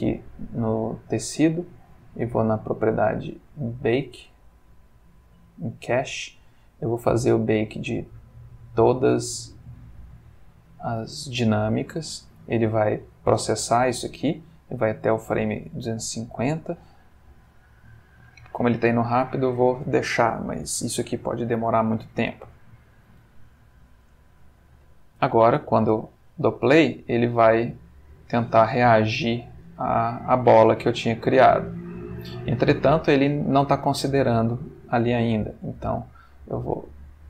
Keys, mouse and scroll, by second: 0.8 middle click, 1.4-2.1 middle drag, 2.4 middle click, 4.1 middle click, 4.7 middle click, 5.6 click, 6.0 middle click, 8.5 click, 25.8 space, 30.1-33.1 middle drag, 33.8 Escape, 35.0 click, 36.6 click.